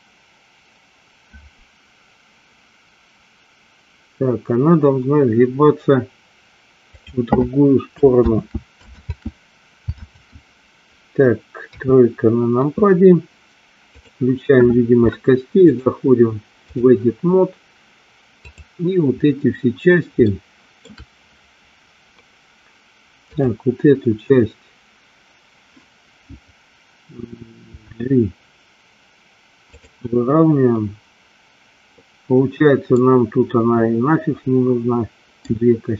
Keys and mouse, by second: 8.5 ctrl+z, 10.3 ctrl+z, 11.8 KP_3, 15.8-17.0 drag, 20.4 shift+middle click, 23.4 click, 27.8 g, 29.8 click, 33.0-35.5 middle drag.